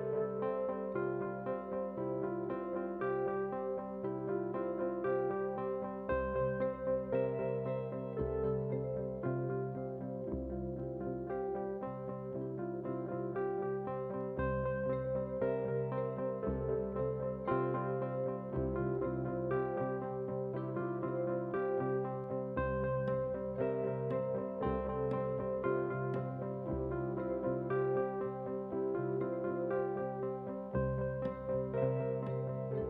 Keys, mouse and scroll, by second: 1.4-19.4 drag, 20.0-22.8 typing, 24.1 click, 26.0 KP_2, 26.9 KP_0, 28.7 click.